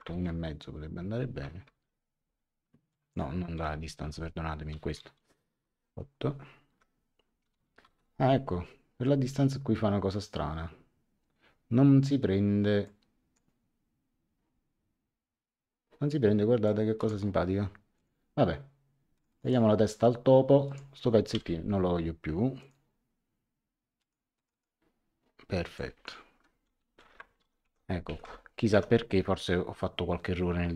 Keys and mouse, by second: 0.0 KP_1, 0.1 KP_Decimal, 0.2 KP_5, 1.7 Tab, 2.9 click, 3.5 KP_1, 4.0 Tab, 5.6 KP_8, 6.7 Tab, 7.4 KP_0, 7.5 KP_Decimal, 7.6 KP_Decimal, 7.8 KP_9, 12.8 click, 16.6 click, 17.9 click, 19.1 click, 20.6 click, 21.3 Delete, 22.6 click, 24.0 click, 25.7 click, 27.0 Home, 28.1 Tab.